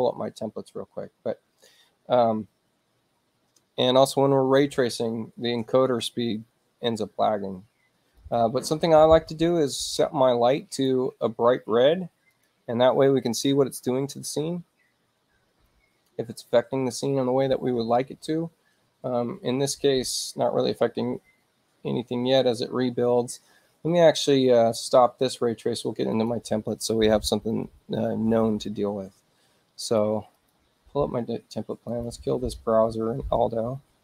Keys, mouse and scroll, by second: 8.2 click, 9.7 click, 10.7 click, 12.3 click, 26.1 click, 29.8 click, 30.3 click, 31.9 click.